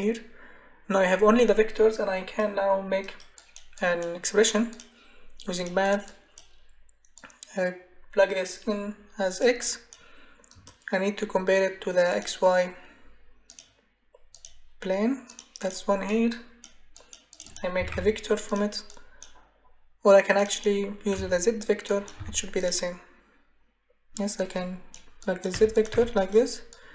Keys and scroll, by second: 17.5-18.4 typing, 21.1 y, 22.2 z, 25.5 Delete.